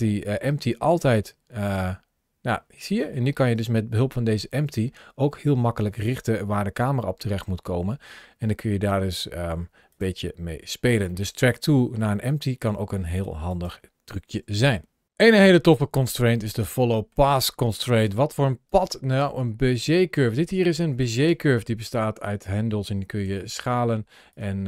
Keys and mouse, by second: 0.7 click, 1.5 click, 1.7 g, 9.7 click, 11.0 middle click, 11.9 g, 13.3 click, 16.3 middle click, 17.9 g, 18.5 right click, 19.1 middle click, 20.0 g, 20.4 right click, 21.1 Tab, 21.9 click, 23.1 s, 24.1 click.